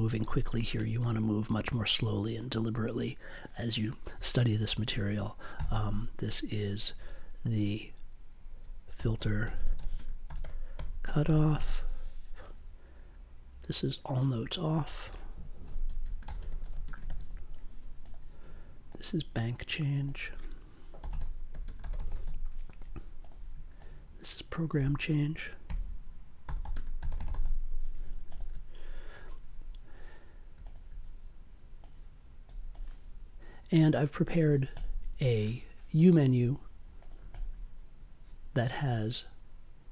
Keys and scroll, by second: 5.5 c, 8.7-12.3 typing, 15.3-17.5 typing, 21.0 b, 21.6 space, 21.8 c, 22.2 e, 25.6-27.9 typing.